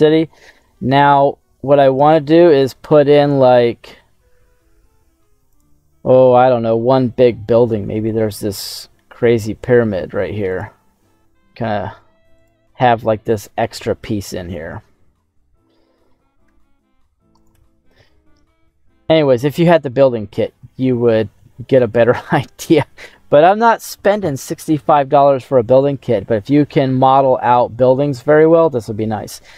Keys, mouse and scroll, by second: 0.6-2.7 middle drag, 3.0 shift+a, 7.6 g, 8.0 z, 10.4 click, 10.7 s, 12.3 click, 12.9-14.8 middle drag, 14.8 scroll up 1, 15.1 middle click, 15.7 middle click, 16.4 s, 17.3 click, 17.4 g, 17.9 z, 19.1 click, 19.3-21.6 middle drag, 21.6 scroll down 1, 25.4-27.3 middle drag, 27.4 scroll up 2, 27.9 middle click, 28.8-29.5 scroll down 2.